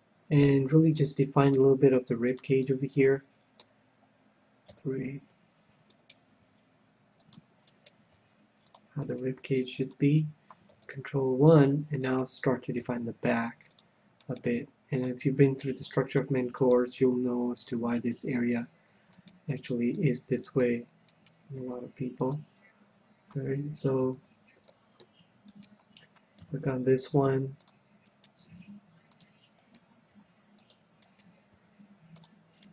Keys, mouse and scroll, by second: 0.3-1.7 drag, 1.5-3.3 right drag, 2.1 g, 2.9-4.5 drag, 3.1-4.7 middle drag, 5.1 KP_3, 6.4-11.3 right drag, 6.9 g, 7.9-12.0 drag, 8.6 g, 9.8 g, 12.4-14.5 right drag, 13.4 g, 14.2-16.5 drag, 14.6-16.5 right drag, 15.0 g, 16.1 g, 17.4 g, 18.5-19.7 drag, 18.5 right click, 18.6 g, 19.7-21.1 right drag, 20.5-22.0 middle drag, 21.5-22.8 right drag, 22.0 g, 22.8-24.5 drag, 25.1-26.8 middle drag, 25.9-27.7 right drag, 26.9 g, 28.1-32.7 drag, 28.5-32.7 right drag, 29.0 g, 30.6 g, 32.0 g.